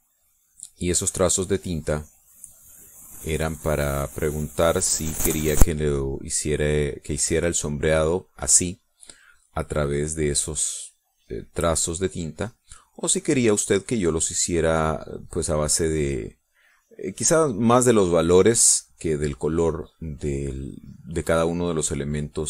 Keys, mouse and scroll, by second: 0.8 click, 2.0 click, 2.4 click, 3.1 click, 3.6 click, 4.1 click, 4.6 click, 5.3 click, 5.9 click, 6.3 click, 6.8 click, 7.3 click, 7.8 click, 8.2 click, 8.7 click, 9.2 click, 9.7 click, 10.1 click, 10.6 click, 11.1 click, 11.8 click, 12.3 click, 12.7 click, 13.4 click, 13.9 click, 14.4 click, 14.9 click, 16.6 click, 17.3 click, 17.8 click, 18.7 click, 19.1 click, 19.7 click, 20.3 click, 20.9 click, 21.4 click, 21.9 click, 22.3 click.